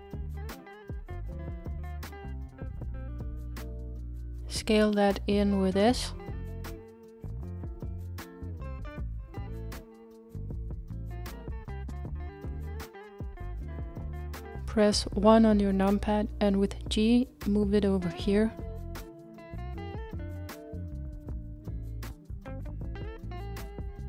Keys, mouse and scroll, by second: 2.5-3.3 scroll down 2, 3.3-5.5 shift+middle drag, 5.5-9.0 s, 9.0-10.3 scroll up 2, 10.3 s, 12.5 g, 15.7 KP_1, 16.8-17.2 scroll up 3, 17.9 g.